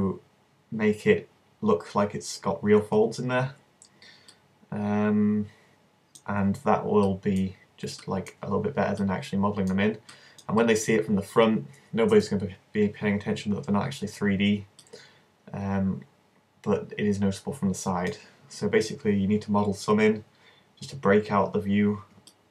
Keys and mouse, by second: 17.0-22.4 middle drag.